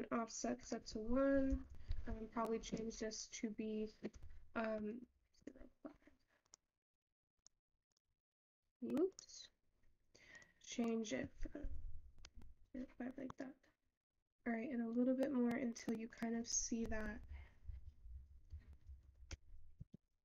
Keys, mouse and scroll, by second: 0.6-6.4 drag, 6.6 click, 10.4-14.8 drag, 14.8 scroll up 2, 15.0-19.2 drag, 19.2 Right.